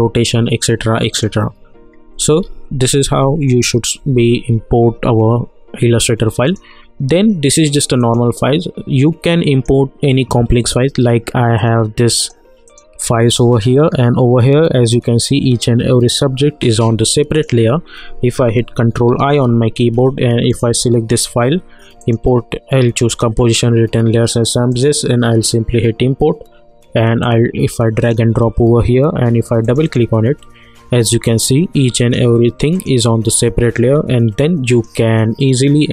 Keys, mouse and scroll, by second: 2.4 ctrl+z, 6.4 click, 13.9 scroll down 1, 14.1 scroll up 1, 14.2-15.8 scroll down 1, 15.8-16.9 scroll up 1, 17.3 click, 18.9 ctrl+i, 20.5 click, 27.5 click.